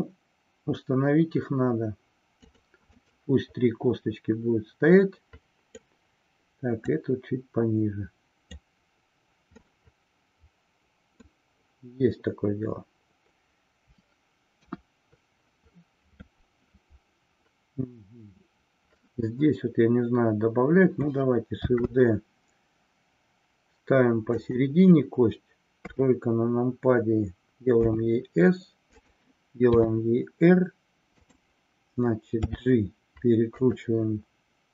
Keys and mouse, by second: 3.0-6.0 middle drag, 7.0-8.8 drag, 9.6-11.4 middle drag, 14.6 KP_1, 21.6 shift+d, 25.8 KP_3, 27.8 s, 29.1 click, 31.3 click.